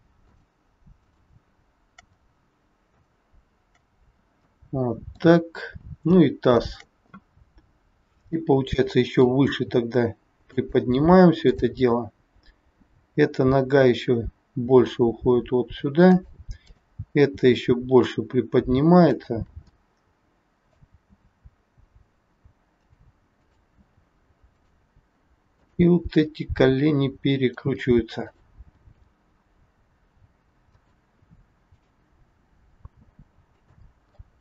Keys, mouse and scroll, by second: 0.3 shift+click, 0.9 shift+click, 4.0-4.6 scroll down 3, 4.5 middle click, 6.4 shift+click, 7.4 scroll down 2, 8.3 middle click, 9.5 g, 11.4 click, 12.8 g, 16.6 click, 17.3 g, 19.7 middle click, 20.9 g, 23.4 click, 23.8 g, 25.5 click, 26.1 g, 28.1 click, 28.7 g, 31.7 click, 32.3 g, 34.1 middle click.